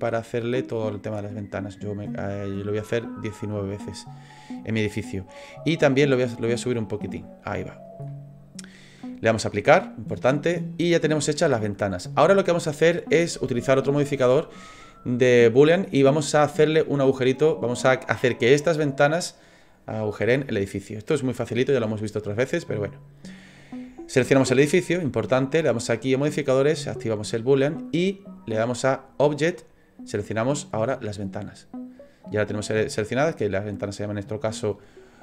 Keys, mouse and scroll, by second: 0.1 click, 0.8 click, 3.5 middle click, 6.0 click, 8.0 middle click, 9.7 click, 10.4 middle click, 10.9-11.4 scroll up 3, 11.6 shift+middle click, 22.6 click, 24.3 right click, 25.7 click, 30.1 click.